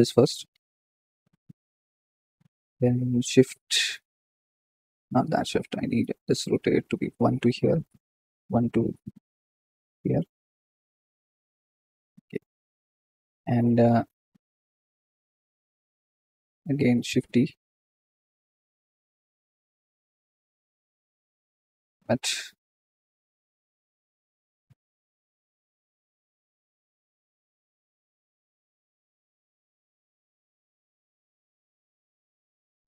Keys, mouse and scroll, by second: 5.0 KP_1, 6.0 r, 6.5 g, 8.0 shift+d, 9.8 r, 10.7 click, 16.4 click, 16.9 shift+d, 20.3 r, 21.4 KP_7, 22.3 g, 24.8 r, 28.2 g, 28.9 KP_1, 30.0 g, 32.3 shift+d.